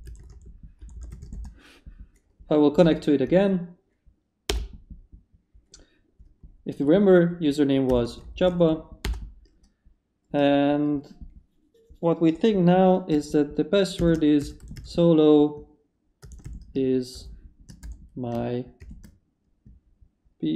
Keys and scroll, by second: 0.0-1.7 typing, 2.8 Up, 4.5 Return, 7.6-9.0 typing, 9.0 Return, 13.7-18.8 typing.